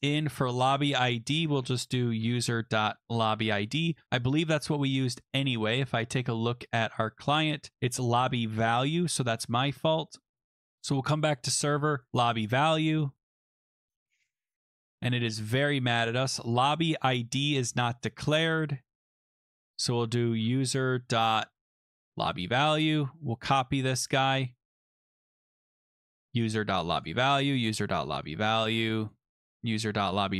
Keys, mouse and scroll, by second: 0.3 click, 0.5 click, 1.4 click, 1.7-2.8 typing, 5.3-6.1 scroll, 6.7 click, 7.0 click, 7.7 click, 7.9 click, 8.0 click, 8.7 ctrl+c, 9.4 click, 10.7-12.0 scroll, 12.0 click, 12.1 ctrl+v, 12.1 click, 12.1 middle click, 13.2 scroll, 16.1 click, 16.5 click, 19.6 click, 19.9-21.0 typing, 21.9 click, 22.0 click, 22.0 ctrl+v, 23.9 click, 24.1 ctrl+c, 25.5 click, 25.6 click, 26.9 ctrl+v, 26.9 click, 27.0 click, 27.1 ctrl+v, 28.4 click, 28.9 click, 29.1 click, 29.4 ctrl+v, 29.5 scroll, 30.2 click, 30.3 click.